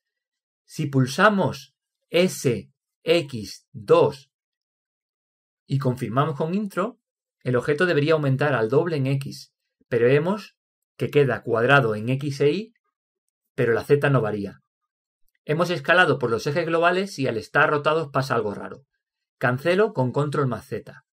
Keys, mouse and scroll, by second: 1.7-3.5 middle drag, 3.6 s, 12.9-15.0 middle drag.